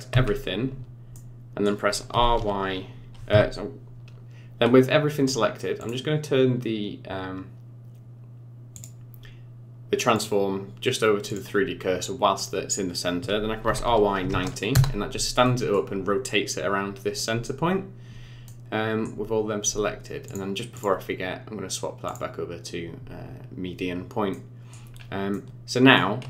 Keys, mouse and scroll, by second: 0.2 a, 1.1 middle click, 2.1 r, 5.8 click, 10.1 click, 13.6 r, 15.4 middle click, 20.3 click, 20.8 click, 24.3 middle click, 24.9 scroll up 4, 25.3 middle click.